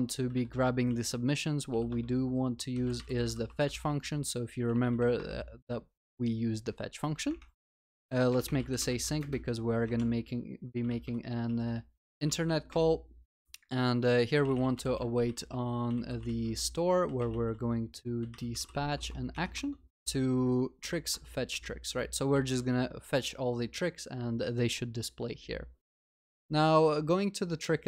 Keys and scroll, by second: 0.4 ctrl+y, 0.9 ctrl+y, 0.9 ctrl+s, 12.2 Return, 21.1 Return, 22.4 ctrl+s.